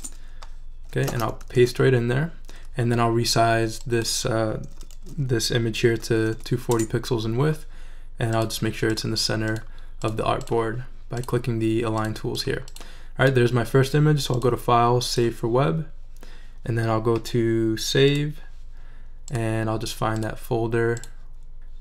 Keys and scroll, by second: 0.0-0.2 typing, 1.5 super+v, 5.7-6.8 typing.